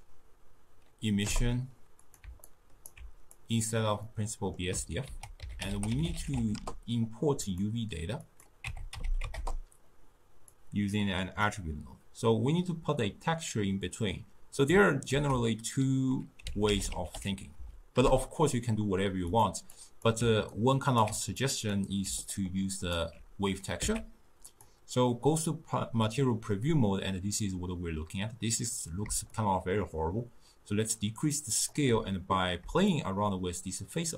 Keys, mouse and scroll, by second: 2.5-3.4 alt+right drag, 3.4-4.1 drag, 4.1-5.1 middle drag, 5.1 ctrl+a, 5.8 t, 8.3-13.6 drag, 15.1 ctrl+a, 19.8 click, 20.5-21.4 alt+right drag, 21.4 click, 22.3-23.8 alt+right drag, 23.8 z, 29.4-32.4 shift+drag, 33.0-34.1 shift+drag.